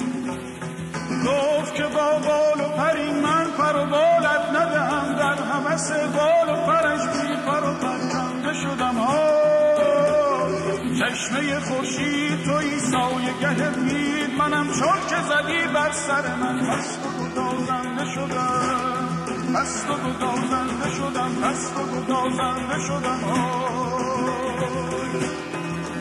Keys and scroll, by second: 8.8-10.9 typing, 16.1-18.4 typing.